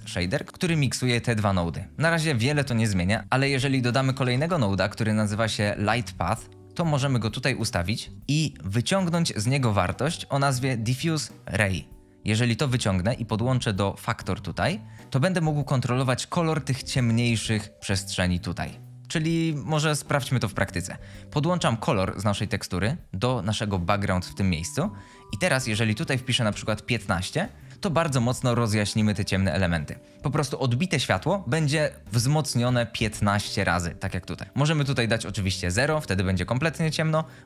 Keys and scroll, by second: 3.8-4.3 typing, 5.8 Return, 26.2 typing, 27.0 Return, 34.4 typing, 35.0 Return, 35.2 Return, 35.5 Return.